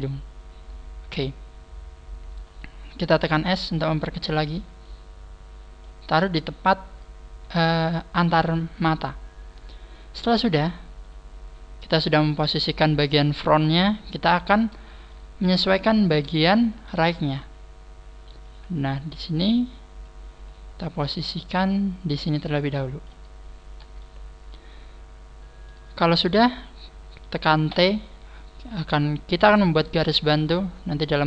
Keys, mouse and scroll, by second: 2.3 s, 4.3 click, 9.2 scroll up 1, 12.1-13.0 scroll down 2, 13.0 scroll down 2, 15.1 shift+middle click, 16.5-16.9 scroll down 1, 17.8-18.4 scroll up 3, 18.4 click, 20.3-20.9 scroll up 9, 21.4 click, 21.5 scroll up 1, 23.4 scroll down 4, 24.0 shift+middle click, 27.7 t, 29.8 scroll down 1, 31.1 scroll down 5.